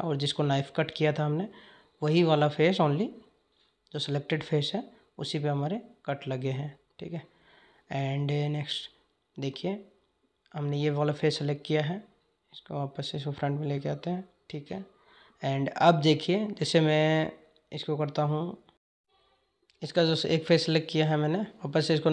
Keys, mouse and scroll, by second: 7.6 click, 12.1 click, 15.0 click.